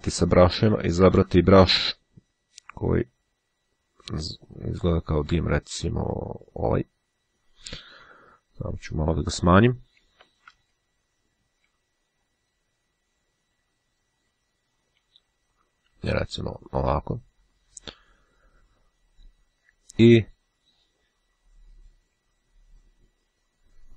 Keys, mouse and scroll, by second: 4.8-5.2 scroll up 1, 6.2-7.4 drag, 10.4 [, 11.5 [, 12.4 [, 14.6 ], 16.8-17.8 drag.